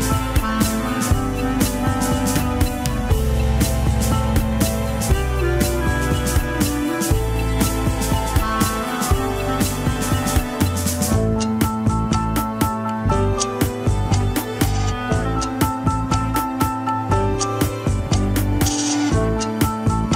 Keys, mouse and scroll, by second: 0.8 g, 2.5-2.8 scroll up 2, 2.8-3.2 shift+middle drag, 3.2 scroll up 1, 4.8 shift+middle click, 5.0-5.3 scroll up 3, 5.5 alt+z, 5.9 shift+middle click, 6.9 click, 7.7 click, 8.7 shift+click, 9.9 shift+w, 11.1 scroll down 4, 11.9 scroll up 2, 13.0-14.6 middle drag, 14.6 click, 15.3-18.0 drag, 18.9 h, 19.1-20.1 middle drag.